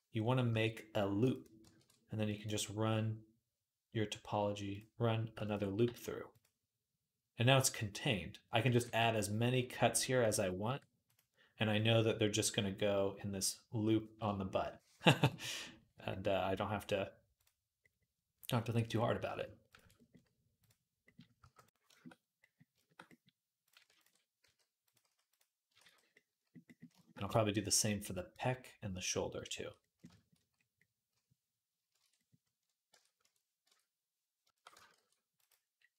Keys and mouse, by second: 0.3 s, 0.3 g, 1.5 ctrl+r, 5.2 ctrl+click, 5.3-8.6 ctrl+middle drag, 5.6 g, 8.6 ctrl+r, 14.7 ctrl+z, 17.1 click, 18.4 click, 19.5 ctrl+click, 20.4-21.5 drag, 21.2 g, 21.5-23.4 shift+middle drag, 23.4 click, 23.7 ctrl+middle click, 23.8 ctrl+click, 23.8-35.9 ctrl+middle drag, 24.7 g, 24.8 s, 25.6 ctrl+z, 31.7 shift+Tab, 32.8 Tab, 33.5 Tab, 34.7 ctrl+r.